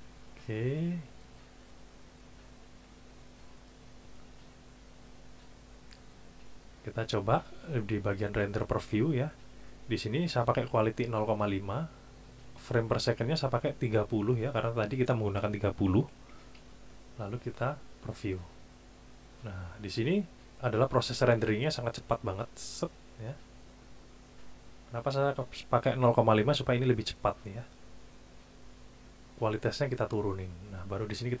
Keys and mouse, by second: 7.8 click, 12.8 click, 13.4 click, 14.3 click, 15.9 KP_3, 16.3 KP_0, 16.6 KP_Enter, 18.2 click, 24.4 click.